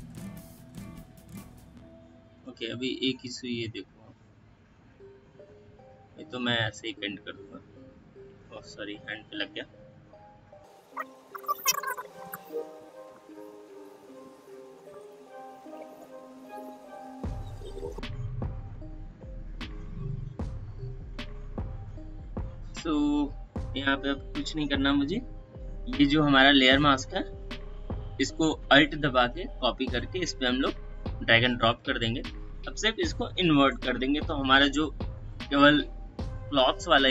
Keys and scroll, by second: 1.5 space, 5.1 ctrl+d, 8.2 ctrl+z, 12.3 space, 21.7 space, 34.0 ctrl+i.